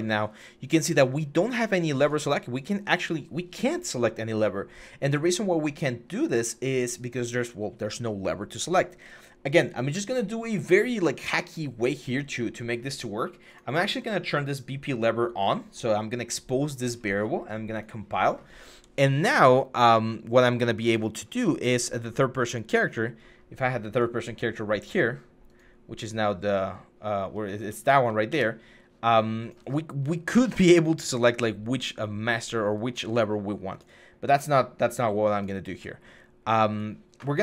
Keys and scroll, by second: 26.9-27.6 typing, 28.0 Escape, 30.1 Delete, 31.4 s, 32.6 a.